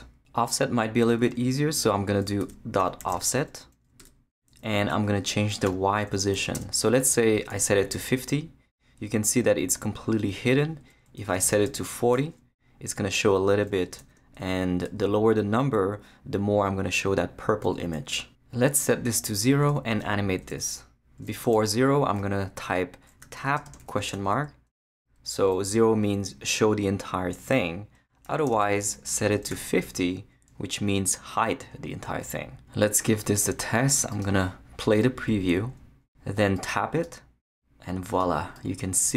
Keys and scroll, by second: 2.2-3.5 typing, 4.0 Return, 4.5 Left, 5.6-8.0 typing, 11.2 Left, 11.7 shift+4, 12.6 4, 14.0 shift+Left, 14.8 shift+i, 19.7 0, 20.3 Left, 21.2 space, 23.0-24.3 typing, 24.7 shift+Right, 25.6 space, 28.2-30.0 typing.